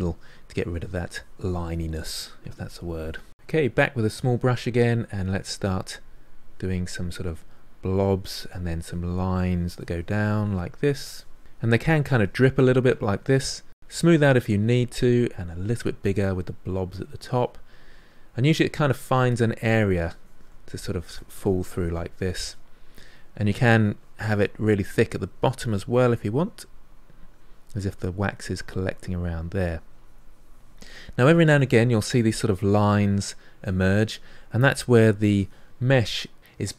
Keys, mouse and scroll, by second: 0.1 shift+click, 0.4 middle click, 0.6 shift+click, 0.9 middle click, 1.4 shift+click, 1.7 middle click, 1.9 shift+click, 2.2-3.3 shift+middle drag, 3.3 f, 4.1 middle click, 4.5 f, 5.0 click, 5.6 middle click, 5.9 click, 6.6 middle click, 6.9-9.3 drag, 9.3 middle click, 9.7-11.2 drag, 11.2-12.7 middle drag, 12.7 shift+click, 13.0-14.5 middle drag, 14.5-15.7 drag, 15.7 middle click, 16.2 click, 17.1 middle click, 17.6-23.0 drag, 23.0 middle click, 23.8-26.8 drag, 28.5-30.6 drag, 30.6-34.4 middle drag, 34.4-35.7 drag, 35.7-36.7 middle drag.